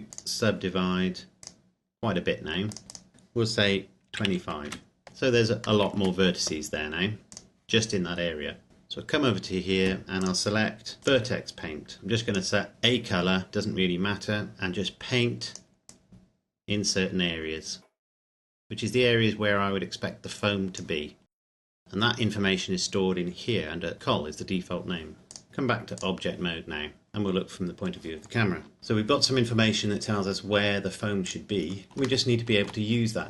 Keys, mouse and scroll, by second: 0.1 click, 4.1 KP_2, 4.2 KP_5, 4.6 KP_Enter, 5.1-5.6 scroll up 1, 5.6 middle click, 5.9 a, 7.3 click, 8.1-8.7 scroll down 1, 8.7 click, 10.1 click, 11.7 scroll down 1, 11.9 click, 13.5 scroll up 1, 14.5 click, 16.2 click, 21.3 click, 25.3 click, 26.7-27.1 scroll down 1, 27.1 KP_0, 28.7 ctrl+s, 31.2 click, 31.6 scroll down 1, 32.2 shift+middle click, 33.0-33.2 scroll up 1.